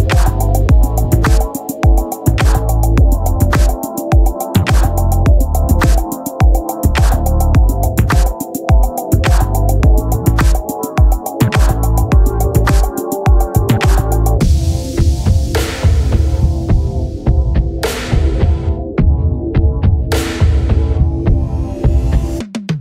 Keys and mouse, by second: 2.1 click, 8.4 click, 14.4 click, 20.3 click, 22.2 click.